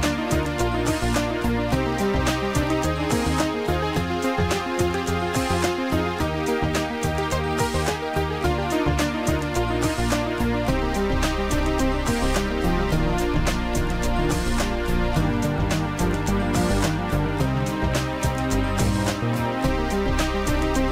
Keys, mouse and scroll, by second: 5.2 click, 5.9 click, 6.4 click, 13.9 click, 18.9 click.